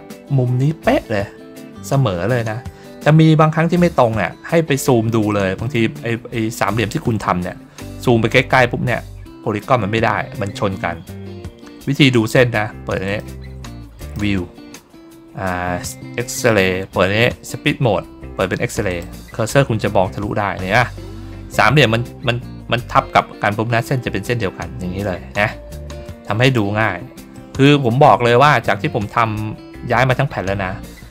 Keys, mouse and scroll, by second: 5.2 middle click, 6.2 middle click, 7.5 ctrl+middle click, 8.3 ctrl+middle click, 13.0 click, 13.9 click, 18.8 click, 25.2-25.8 ctrl+scroll down 4, 26.2 middle click, 26.7 ctrl+middle click, 27.2 middle click, 28.4 ctrl+middle click, 29.6 ctrl+middle click, 30.4-31.1 ctrl+scroll down 3.